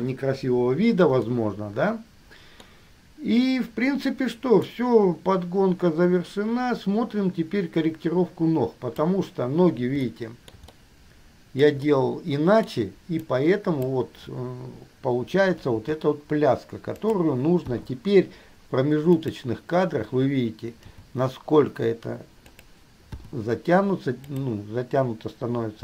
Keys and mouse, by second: 2.9-4.9 middle drag, 8.7 click, 9.2-10.9 middle drag, 12.9-13.6 middle drag, 13.6-14.1 drag, 16.0 g, 18.0 i, 19.4 click, 21.1 g, 23.4 i, 24.5 click.